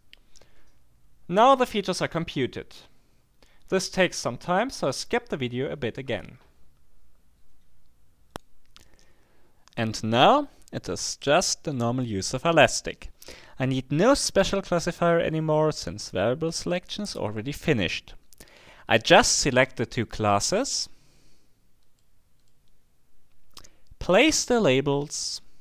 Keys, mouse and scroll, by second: 21.8-23.0 drag.